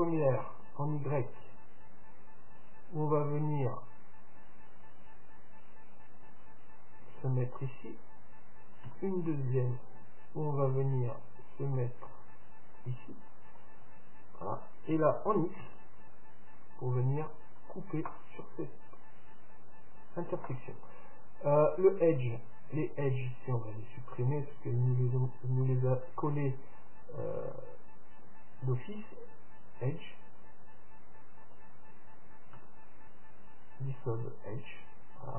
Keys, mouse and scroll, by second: 23.1-25.0 drag, 24.4-26.3 right drag, 26.3 x, 31.5-33.5 right drag, 32.7 x.